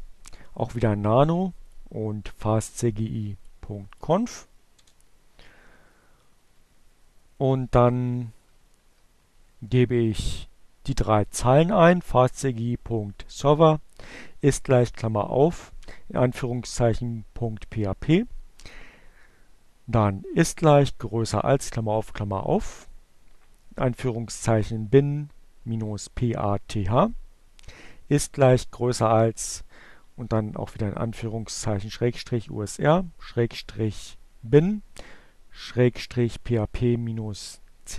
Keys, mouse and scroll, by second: 0.7 click, 1.2-2.9 drag, 3.2 click, 3.7 Return, 5.1 Down, 6.6 Delete, 7.1 Down, 7.2 Delete, 7.4 Down, 7.5 Delete.